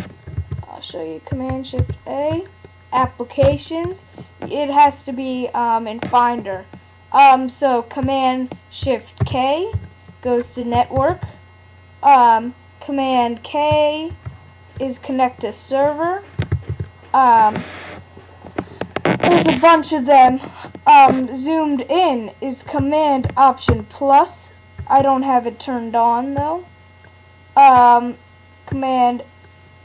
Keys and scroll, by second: 0.4 super+w, 1.8 shift+super+a, 3.4 super+w, 9.2 shift+super+k, 11.0 super+w, 14.1 super+k, 16.5 super+w, 23.7 alt+super+=.